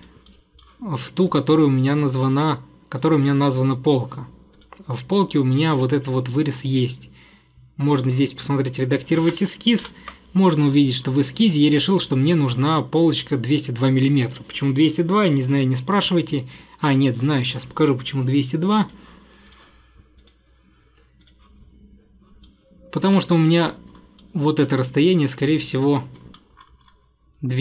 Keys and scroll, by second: 9.9 ctrl+8.